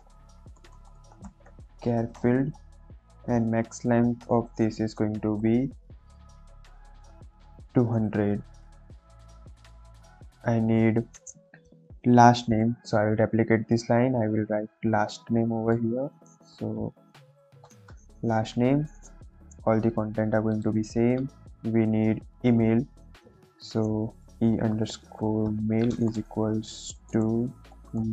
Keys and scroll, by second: 0.0-1.7 typing, 2.1 Return, 2.8 shift+9, 3.2 shift+0, 3.3 Left, 5.3 m, 5.8 a, 6.2 Down, 6.6 Up, 6.9 Return, 8.0 2, 8.4 0, 8.8 Right, 13.2 ctrl+d, 16.7-17.8 typing, 23.4 Return, 24.1-28.1 typing.